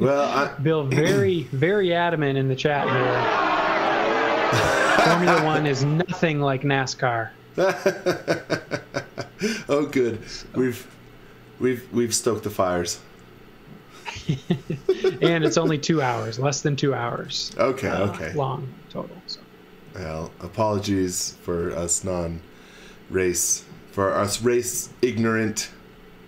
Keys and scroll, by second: 0.1 x, 1.5 space, 2.6 space, 4.5-6.2 typing, 9.8 space, 10.8 space, 14.3-16.1 typing, 17.1 z, 17.5 s, 21.5 x, 23.9-25.5 typing.